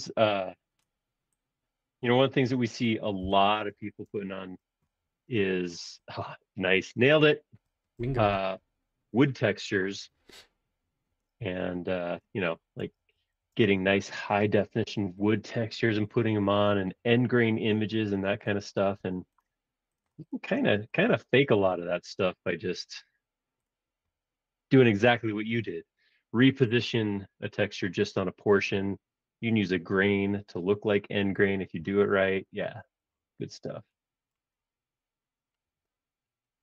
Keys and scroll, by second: 3.2 Return, 3.5 space, 3.7 o, 4.0 Return, 8.3 super+Tab, 11.2 super+Tab, 12.2-13.5 typing, 18.8 space, 19.0 Escape, 31.8 Return, 32.4 ⟲, 32.6 space, 33.3 space.